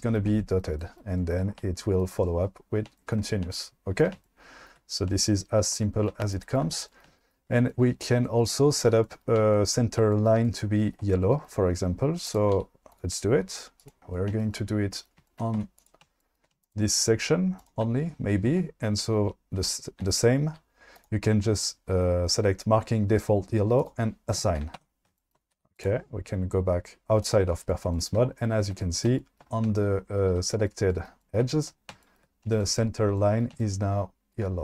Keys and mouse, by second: 10.1-10.8 shift+middle drag, 12.5 q, 13.8 click, 14.0 Tab, 14.3 shift+middle click, 15.2 shift+middle click, 15.5 2, 16.7 shift+click, 17.6 shift+click, 21.0 click, 24.8 Tab, 25.5 q, 27.2 click.